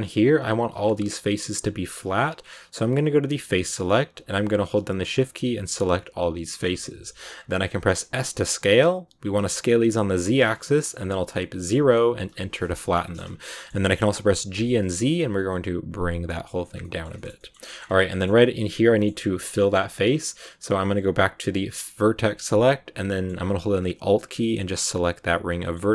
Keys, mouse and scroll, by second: 2.9 click, 3.7 right click, 4.5 shift+right click, 5.2 shift+right click, 5.6 shift+right click, 6.0 shift+right click, 6.4 shift+right click, 6.6 scroll up 1, 6.6 scroll down 1, 6.7 middle click, 7.2-7.9 scroll down 3, 7.9 s, 12.5 middle click, 12.6 scroll down 1, 12.9 shift+middle click, 13.1-14.5 scroll up 3, 13.3 middle click, 14.5 g, 16.6 scroll up 1, 16.6 scroll down 2, 16.7 middle click, 17.7 scroll up 2, 18.0 middle click, 18.7 scroll up 1, 18.9 middle click, 19.7 scroll down 1, 19.8-22.1 middle drag, 22.1 click, 23.0-24.4 middle drag, 24.4 alt+right click, 25.5-25.9 middle drag.